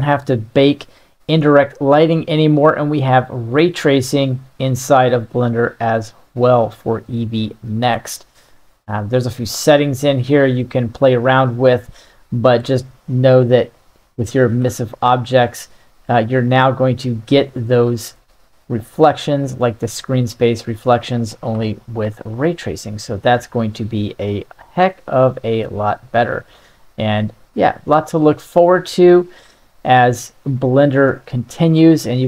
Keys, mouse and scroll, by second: 4.3 click, 5.5 click, 14.0 right click, 14.7 g, 17.6-18.3 middle drag, 19.1 middle click, 21.6 g, 24.3 drag, 26.0-27.1 drag, 28.8 drag, 31.2-32.2 middle drag.